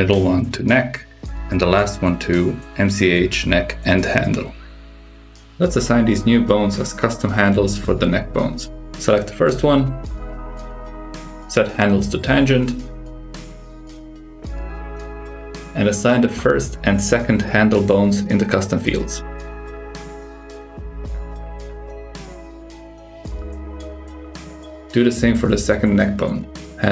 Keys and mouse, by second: 1.9 click, 2.4 BackSpace, 5.1 super+KP_6, 6.0 click, 7.3-8.4 drag, 10.8 click, 13.0-14.1 drag, 15.0-15.9 drag, 16.8-20.1 drag, 21.5-24.3 drag, 25.7 click, 26.6-26.9 drag.